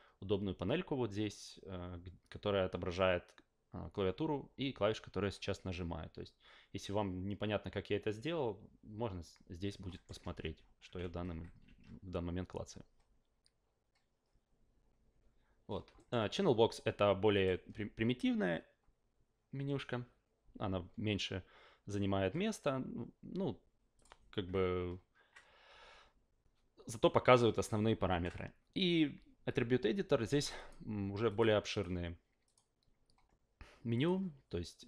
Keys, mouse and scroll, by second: 9.9 alt+middle click, 10.2 ctrl+a, 11.0 ctrl+a, 11.6 ctrl+a, 15.9 alt+middle click, 17.3 click, 23.9 click, 28.1 ctrl+a, 30.5 click, 31.3 click, 31.7 click, 32.4 click, 33.9 click.